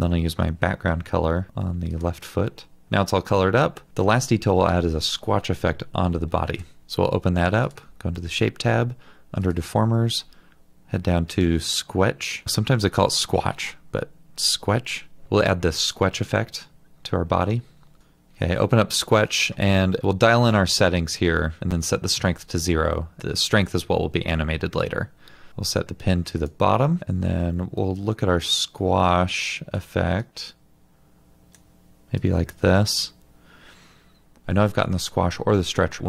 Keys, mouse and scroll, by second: 6.8 alt+double click, 18.0 double click.